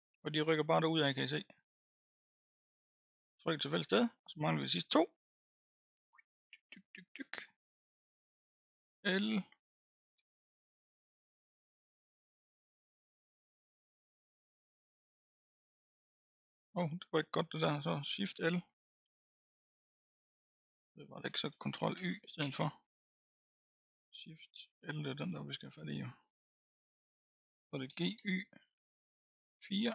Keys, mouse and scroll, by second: 0.2-1.1 scroll up 2, 1.1-2.4 middle drag, 2.4 click, 2.8-3.7 scroll up 4, 3.7-4.1 scroll up 2, 4.1-5.6 middle drag, 5.6 click, 6.3-7.3 scroll up 8, 7.3-8.9 middle drag, 8.9 l, 10.1 l, 11.0 l, 12.1 l, 12.7-14.1 middle drag, 14.1 l, 14.6-15.8 middle drag, 15.8 l, 19.2 shift+l, 20.3 shift+l, 21.5 ctrl+z, 21.9 ctrl+z, 22.4 ctrl+z, 23.0-25.2 middle drag, 25.2 l, 25.7 middle click, 26.7-27.9 scroll down 3, 27.9 g.